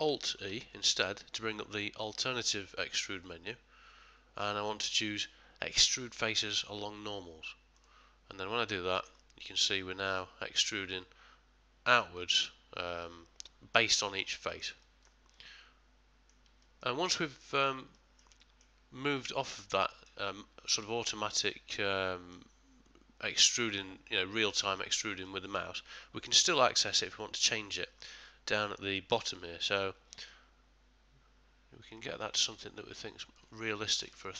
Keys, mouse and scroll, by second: 0.5 alt+e, 12.2 middle click, 14.0 ctrl+middle click, 14.4 shift+middle click, 14.8 ctrl+middle click, 15.3 middle click, 16.6 ctrl+middle click, 17.2 shift+middle click, 17.9 middle click, 18.4 ctrl+middle click, 19.8 middle click, 21.7 middle click, 24.8 middle click, 25.2 ctrl+middle click, 30.3 shift+click, 33.9 ctrl+middle click, 34.2 shift+middle click.